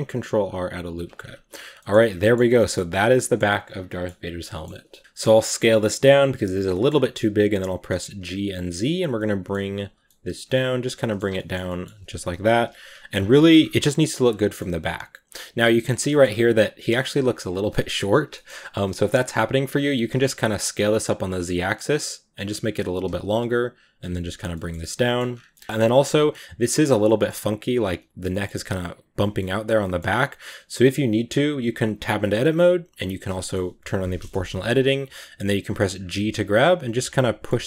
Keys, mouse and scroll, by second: 1.0 Tab, 1.0-1.5 scroll down 5, 1.5 a, 1.6 middle drag, 2.1 middle click, 2.4-5.1 middle drag, 5.1 s, 6.6 middle click, 6.9 g, 9.0-9.6 middle drag, 9.6 g, 9.9-10.3 middle drag, 10.3 g, 10.8-11.2 middle drag, 11.2 a, 11.2 middle drag, 11.4 scroll down 3, 11.5 middle click, 12.5 KP_1, 13.0 scroll down 5, 13.2 shift+middle drag, 13.4 scroll up 5, 13.9 right click, 14.1 scroll down 2, 14.3-16.1 shift+middle drag, 16.1-16.4 shift+scroll up 2, 17.5 scroll down 1, 17.6-19.7 shift+middle drag, 19.7 s, 22.9 g, 23.9 g, 24.4-25.1 shift+middle drag, 25.1 scroll up 4, 25.4 middle click, 25.6 Tab, 25.9-26.5 scroll up 3, 26.0 middle click, 26.6-29.5 middle drag, 29.5 right click, 29.7 middle click, 30.2 right click, 30.5 scroll up 1, 30.6-33.7 shift+middle drag, 33.7 o, 33.9 middle click, 34.7 g, 36.4 right click, 36.4 g, 37.1 middle click, 37.4 g.